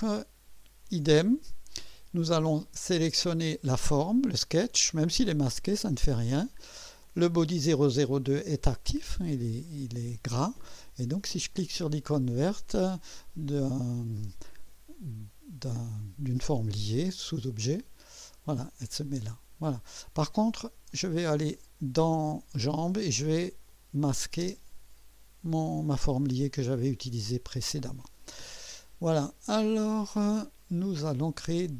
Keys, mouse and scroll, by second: 2.9 click, 17.8 click, 20.9 click, 23.7 click, 24.4 space, 26.4 click.